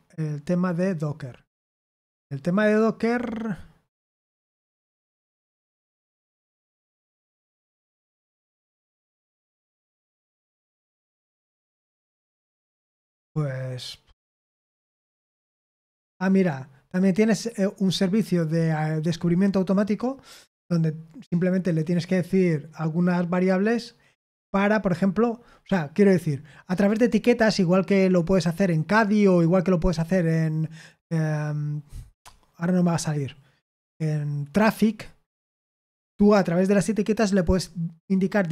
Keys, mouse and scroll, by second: 1.0-1.8 scroll down 2, 1.8-5.0 scroll down 1, 5.0-7.2 scroll down 1, 7.2-8.3 scroll down 1, 8.3-11.5 scroll down 1, 11.5-12.1 scroll down 1, 12.1-13.4 scroll down 2, 13.4-38.5 scroll down 1.